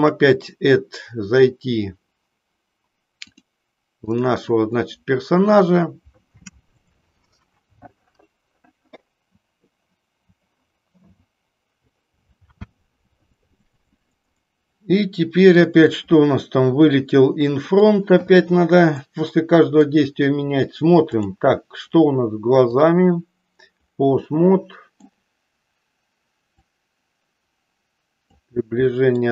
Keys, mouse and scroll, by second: 4.6 click, 18.9-19.8 middle drag, 22.6 click, 24.2 middle click, 26.6-28.2 drag, 28.8 middle click.